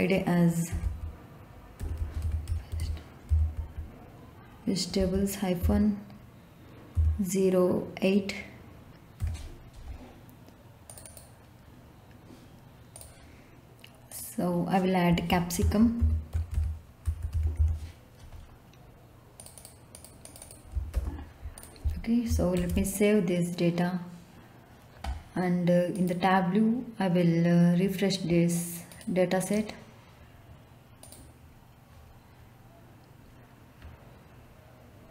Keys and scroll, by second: 0.4-5.6 typing, 6.9 0, 9.2 8, 15.1-18.1 typing, 20.4-21.4 typing, 22.5 ctrl+s.